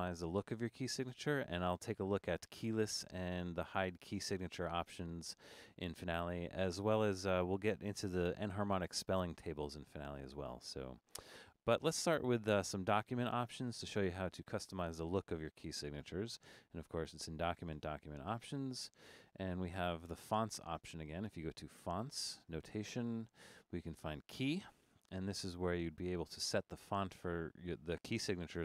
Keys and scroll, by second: 0.3 super+=, 1.3 super+=.